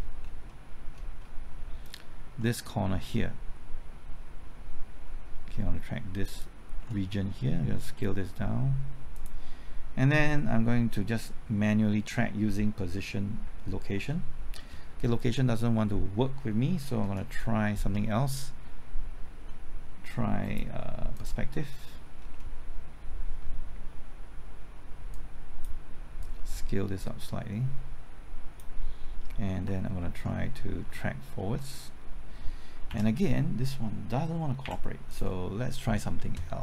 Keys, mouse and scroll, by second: 0.4 middle click, 1.0-2.9 scroll up 1, 6.2 ctrl+click, 7.8 ctrl+s, 9.1 click, 13.9 alt+Right, 17.0 Left, 19.4 middle click, 20.4 click, 22.1-25.1 scroll down 1, 25.1-28.8 drag, 31.3 ctrl+t, 32.8 ctrl+z, 34.6 Delete, 35.0 click.